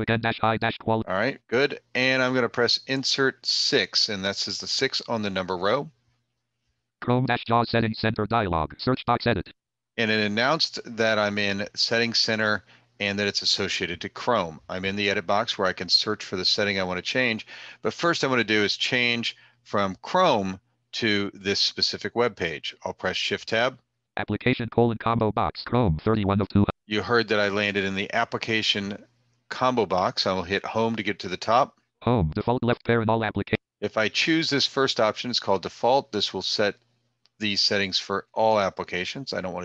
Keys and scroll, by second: 2.9 Insert, 2.9 6, 22.4 shift+Tab, 30.3 Home.